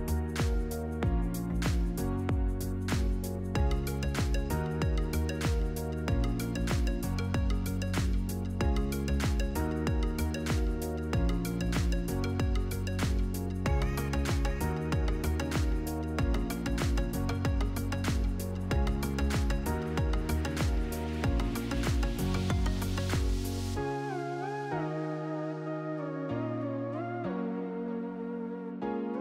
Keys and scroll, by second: 6.0 ctrl+-, 20.4 4, 20.6 Tab, 20.7 4, 21.3 Return.